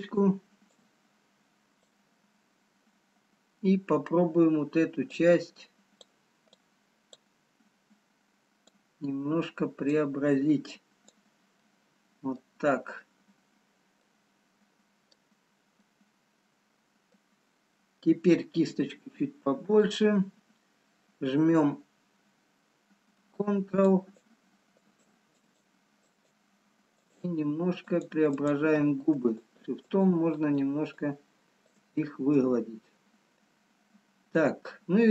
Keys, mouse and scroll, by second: 2.4 click, 6.0 click, 8.9 click, 12.1 click, 12.1 middle click, 16.8 middle click, 19.1 f, 24.1 ctrl+click, 30.8 ctrl+click, 32.0 shift+click.